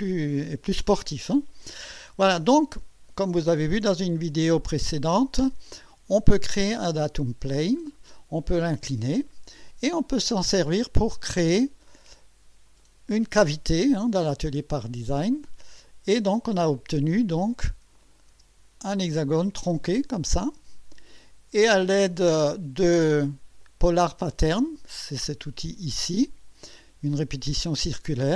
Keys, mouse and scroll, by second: 6.1 click, 6.4 space, 7.5-7.9 scroll down 2, 8.1-10.4 drag, 12.8 click, 15.6 space, 16.4 scroll up 1, 17.9 click, 18.3 space, 18.9-21.3 drag, 23.6 click.